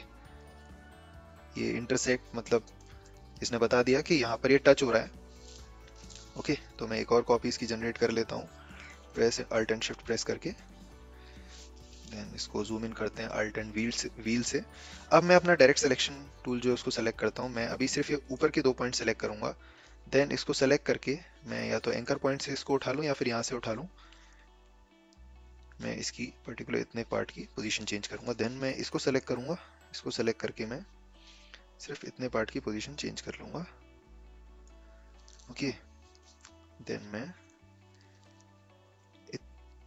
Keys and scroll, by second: 15.1 a.